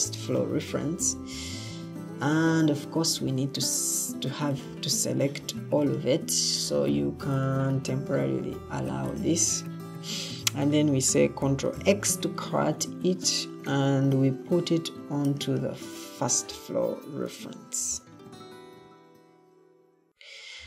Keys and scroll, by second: 3.1 Escape, 11.6 ctrl+x, 17.7 ctrl+v.